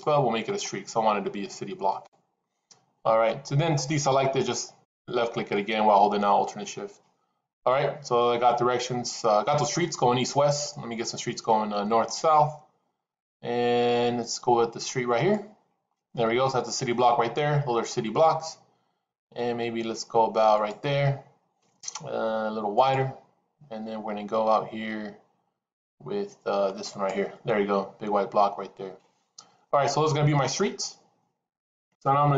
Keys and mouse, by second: 0.4 alt+shift+click, 1.8 alt+shift+click, 4.7 alt+shift+click, 5.3 alt+shift+click, 15.1 alt+shift+click, 20.4 alt+shift+click, 22.7 alt+shift+click.